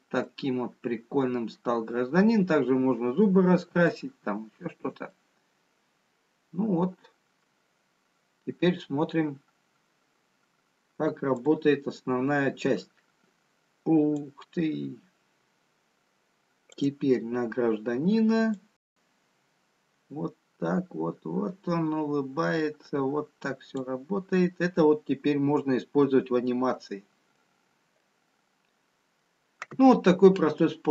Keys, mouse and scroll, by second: 1.4 middle click, 2.8-3.3 scroll down 2, 4.2 shift+middle click, 8.1 middle click, 12.6 click, 13.7 click, 17.5 click, 18.8 click, 26.8 middle click, 26.8-29.2 scroll up 2, 29.2 middle click, 29.2-30.0 scroll down 2, 30.7 middle click.